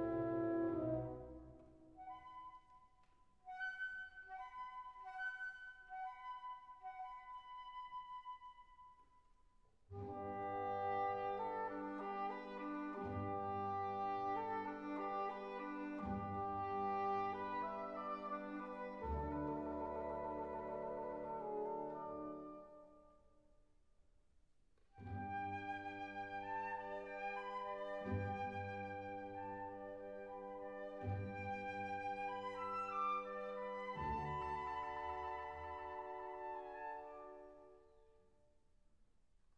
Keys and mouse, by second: 2.0 Tab, 5.3 Tab, 5.8 ctrl+r, 7.6 Tab, 22.4 click, 27.7 click, 27.8 Tab, 28.8 ctrl+r, 32.2 click, 32.8 ctrl+r, 34.7 click, 35.4 ctrl+r, 36.8 Tab, 38.6 Tab, 39.4 ctrl+r.